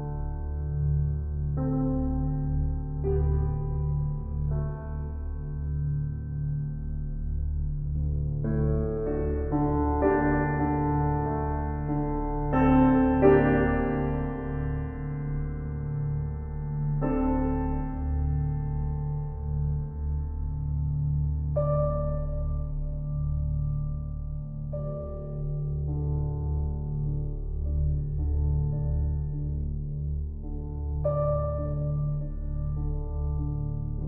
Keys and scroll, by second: 10.9 Right, 16.5 ctrl+l, 28.0 [.